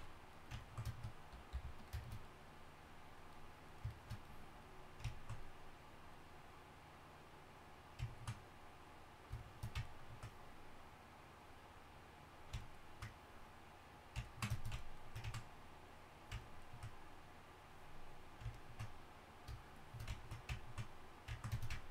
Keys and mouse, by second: 1.5 f, 8.3-13.3 middle drag.